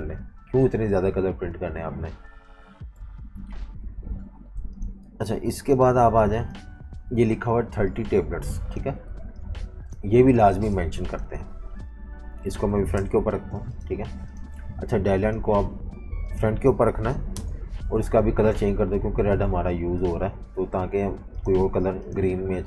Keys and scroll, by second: 2.3 F19, 3.3 super+-, 3.5 super+-, 3.7 super+-, 5.0-6.6 typing, 9.1-11.3 typing, 12.9 shift+super+], 13.4 typing, 17.3 shift+super+], 21.8 v.